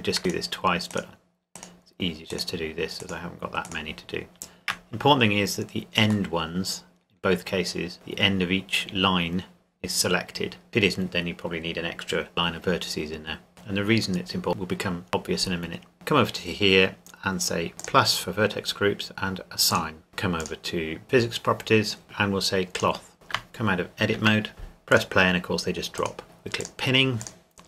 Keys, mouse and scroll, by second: 6.3 middle click, 12.3 shift+middle click, 15.9 click, 17.8 click, 20.4 click, 22.7 click, 24.1 Tab, 24.9 click.